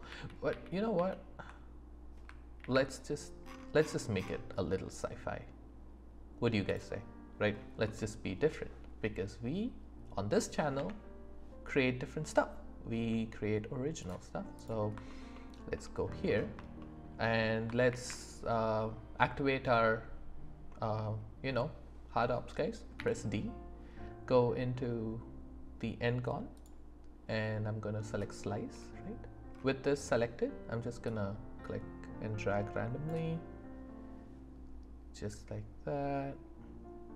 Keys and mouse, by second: 0.1 ctrl+z, 6.6 click, 7.9 middle click, 10.7 Tab, 14.5 click, 15.1 alt+middle click, 16.8 shift+click, 16.9 shift+middle click, 17.8 alt+w, 22.9 d.